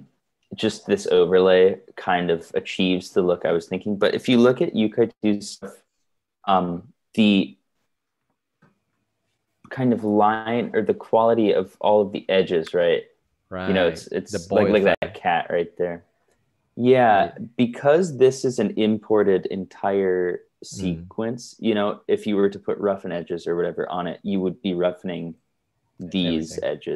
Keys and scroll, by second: 8.3 super+Right, 14.5 super+Right, 15.7 super+Right, 25.6 super+Right.